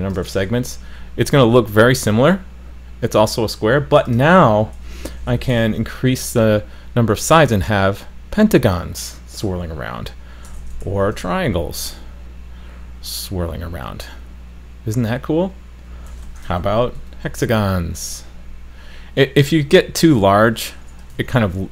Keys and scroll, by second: 0.3 super+s, 5.6 super+s, 10.8 super+s, 16.6 super+s, 21.2 super+s.